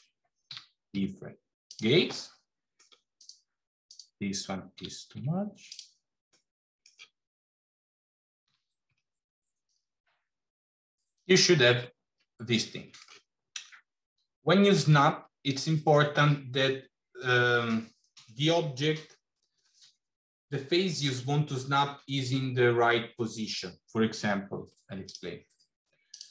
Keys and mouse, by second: 0.3 g, 2.3 middle click, 3.0 click, 3.7 click, 4.7 g, 6.2 middle click, 8.3 g, 11.1 click, 11.7-12.9 middle drag, 13.9 middle click, 15.3 middle click, 24.9 click, 26.0 click.